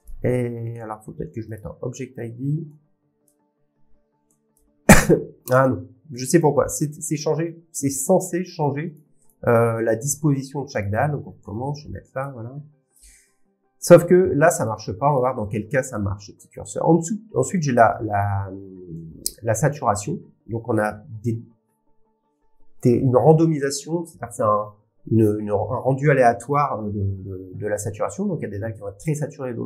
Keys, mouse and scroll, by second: 1.5 click, 3.3 click, 4.5 click, 6.4 click, 8.6 click, 10.8 click, 14.6 click, 15.1 click, 18.2 click, 19.7 click.